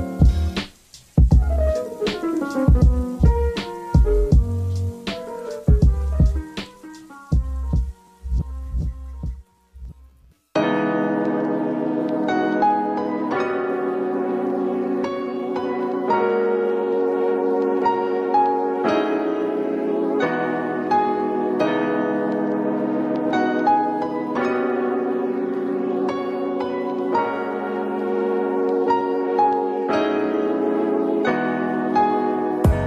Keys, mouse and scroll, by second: 3.8 Tab, 4.5 Tab, 4.8 middle click, 5.6 alt+click, 6.3 middle click, 7.3 shift+click, 10.9 click, 12.3-13.8 middle drag, 13.8 s, 17.4 middle click, 17.9 Tab, 18.1 click, 18.4-20.9 middle drag, 20.9-22.8 drag, 24.0 click, 24.6-26.3 middle drag, 26.3-27.3 scroll down 1, 27.3 click, 28.6-32.8 drag.